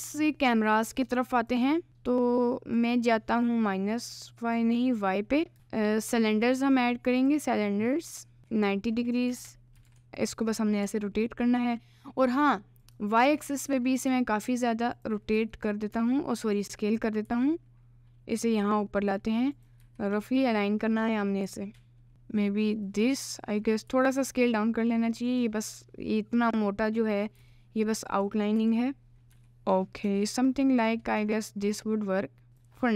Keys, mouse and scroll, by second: 1.4 click, 2.8 click, 5.5 shift+a, 7.9 middle click, 8.4 r, 9.3 r, 10.8 d, 12.9 click, 13.3 s, 15.4 s, 17.3 g, 19.8 KP_Decimal, 21.5 s, 22.1 g, 24.0 s, 27.4 g, 28.7 s, 29.3 g.